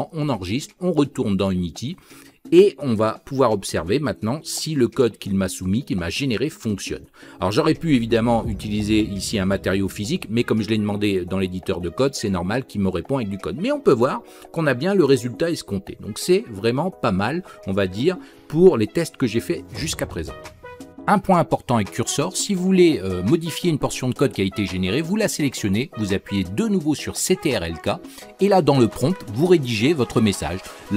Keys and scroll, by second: 25.8 ctrl+k.